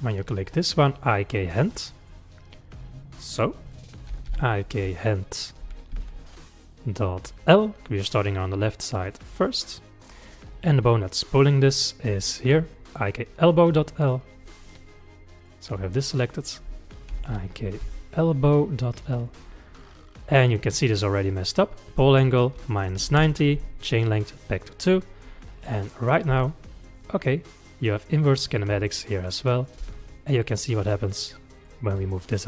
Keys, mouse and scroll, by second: 2.0 click, 3.3-6.5 drag, 11.7-12.3 middle drag, 12.3 click, 14.0 click, 15.4 click, 16.4-19.5 drag, 21.8-25.9 drag, 26.3 g, 29.5 click, 29.8 g.